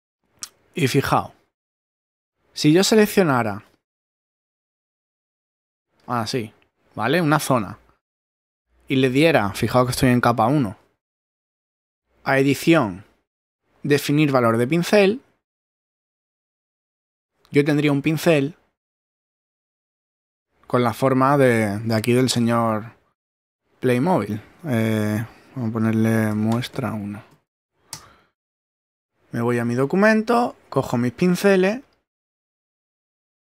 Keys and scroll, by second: 26.3 m, 27.9 Return.